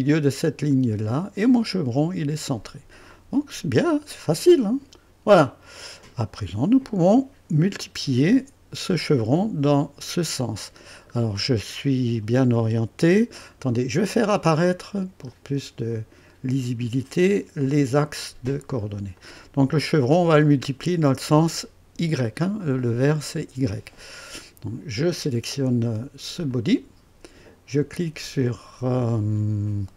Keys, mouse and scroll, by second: 0.7 click, 3.0-6.3 drag, 11.1 scroll down 2, 15.2 click, 18.0 click, 19.2-20.0 drag, 26.4 click.